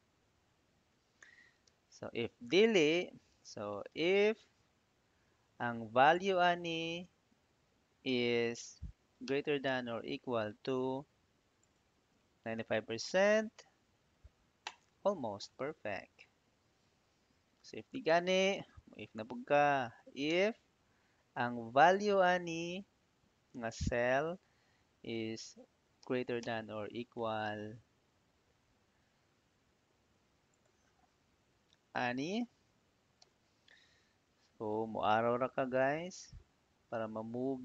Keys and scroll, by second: 1.5 ', 3.4-4.3 typing, 4.3 Tab, 9.1 shift+., 9.5 =, 13.2 /, 17.3-19.0 typing, 20.1 Tab, 25.8 shift+., 26.2 =, 31.4 Up, 33.1 ', 34.8 Right, 36.5 Left.